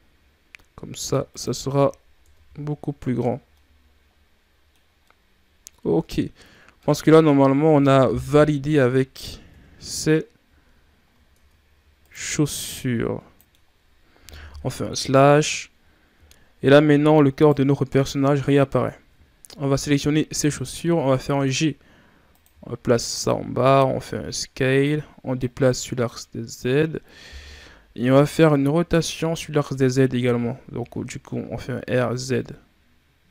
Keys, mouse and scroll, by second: 1.4 z, 1.8 scroll down 4, 2.1 Tab, 3.1 scroll down 3, 3.4-4.9 middle drag, 4.9 scroll up 1, 4.9-6.9 middle drag, 6.9-8.1 scroll up 3, 8.1 KP_1, 9.4 KP_7, 10.7-11.2 scroll down 5, 11.3 Tab, 11.9 right click, 12.6 click, 13.4-14.4 middle drag, 14.4 KP_Divide, 16.0-16.4 scroll down 4, 17.2 right click, 19.1-20.6 ctrl+scroll up 1, 20.6-21.1 shift+scroll down 4, 21.1 g, 22.5 shift+scroll down 4, 22.9 scroll up 2, 23.5 s, 25.3-28.3 drag, 28.5-30.1 shift+scroll up 4, 30.1 r.